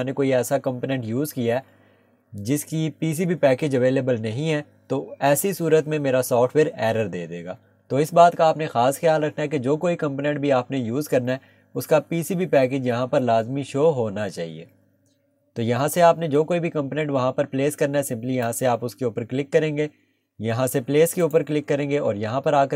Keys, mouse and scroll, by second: 21.2 click.